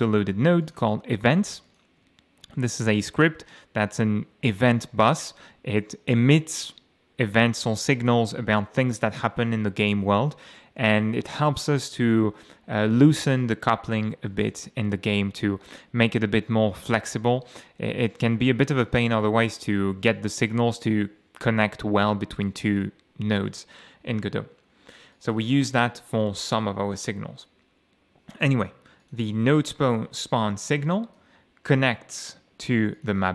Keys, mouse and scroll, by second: 0.6 click, 1.7 ctrl+click, 2.5-2.8 scroll down 2, 3.0 scroll down 2, 16.8 alt+Left, 25.1 click, 25.6 click, 26.1 click, 29.0 click, 30.8 ctrl+shift+F11, 33.0 click.